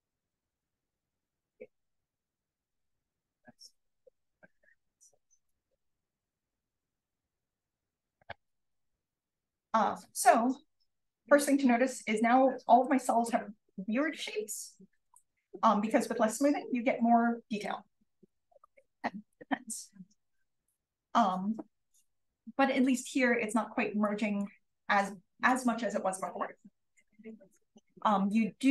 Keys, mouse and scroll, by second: 8.5-8.9 drag, 9.3-10.5 scroll down 1, 10.5-13.1 scroll up 1, 13.1-14.1 scroll down 1, 15.4-15.8 drag, 18.2 click, 18.2-19.9 scroll down 1, 18.9 click, 19.9-20.8 scroll up 1, 20.2 click, 20.8-21.6 scroll down 1, 21.6-23.8 scroll up 1, 23.8-24.9 scroll up 1, 24.0 click, 24.9-26.4 scroll up 1, 26.4 scroll up 1.